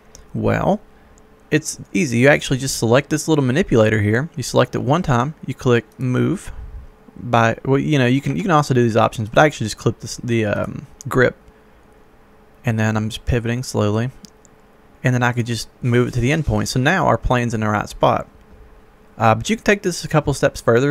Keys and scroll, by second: 8.4 Escape.